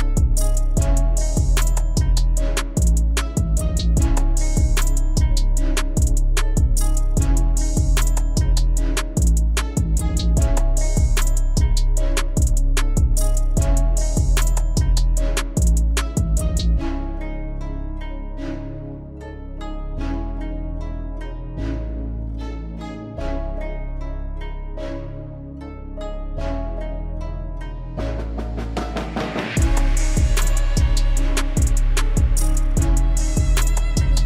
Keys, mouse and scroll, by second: 0.1 g, 1.8 e, 5.2-6.4 middle drag, 6.4 a, 7.2 KP_1, 7.9 g, 8.7 click, 9.1 middle click, 9.7 g, 12.0 KP_1, 12.9 g, 14.9 Tab, 15.3-16.1 middle drag, 16.1 click, 16.6 shift+drag, 17.1 KP_1, 17.5 scroll down 1, 17.9 shift+click, 18.5 alt+x, 18.9 click, 19.2-20.3 middle drag, 20.3 scroll up 1, 20.7-22.1 middle drag, 22.1 Tab, 22.7 Tab, 23.0 click, 23.5 Tab, 23.9 click, 24.4 shift+d, 25.9 KP_1, 26.6 g, 27.5 KP_3, 28.2 g, 30.0 KP_1, 30.6 e, 32.5-32.8 scroll up 2, 32.8 shift+middle click, 33.3 e.